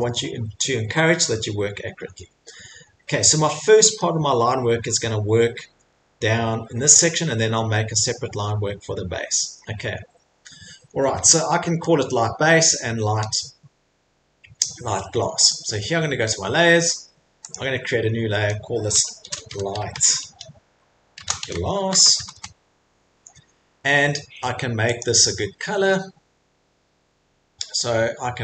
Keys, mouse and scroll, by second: 1.5 middle click, 1.5 middle click, 1.7 middle click, 2.1 middle click, 2.2 middle click, 2.8 middle click, 2.9 middle click, 4.0 middle click, 5.3 middle click, 5.3 middle click, 7.2-7.5 scroll, 10.5 scroll, 10.8 middle click, 10.9 middle click, 11.8 middle click, 15.5 click, 17.5 click, 19.2-22.8 typing, 25.0 click, 28.3 right click.